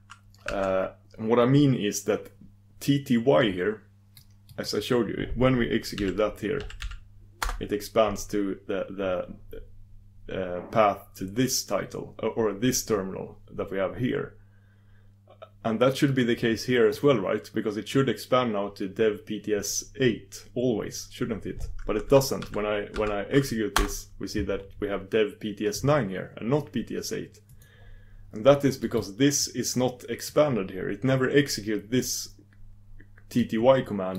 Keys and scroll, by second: 5.7 super+v, 23.8 typing.